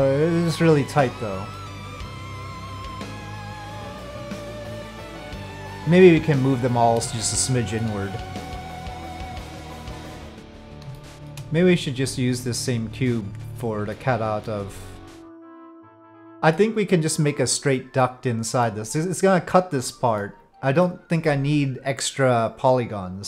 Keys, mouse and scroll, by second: 1.5-3.8 middle drag, 7.2-7.8 shift+middle drag, 10.1 middle click, 11.0 shift+middle drag, 13.9-14.4 middle drag, 15.0-16.6 middle drag, 18.0 middle click, 20.3 middle click.